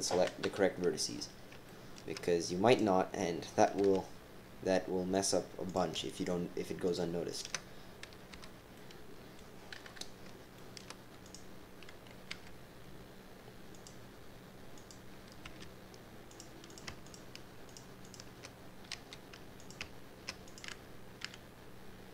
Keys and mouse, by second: 0.4 KP_3, 1.1 middle click, 1.6 middle click, 1.6 shift+click, 1.8 shift+click, 2.6 click, 3.7 g, 4.9-6.2 typing, 5.7 click, 6.1 shift+click, 7.3 shift+click, 8.3 f, 8.8 middle click, 8.8 click, 8.9 middle click, 9.8 KP_3, 10.5 shift+click, 11.2 click, 12.3 e, 14.7 click, 15.4 g, 16.7 click, 17.0 shift+click, 17.6 shift+click, 18.0 shift+click, 18.9 f, 19.6 click, 20.4 click, 21.2 e.